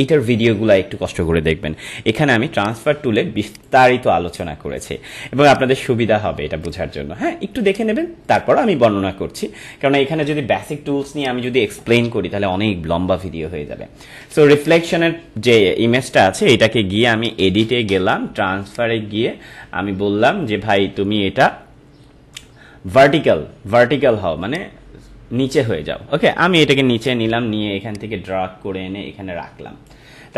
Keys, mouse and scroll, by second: 2.6 click, 11.1 click, 14.6 click, 24.4 click, 26.9-30.3 drag.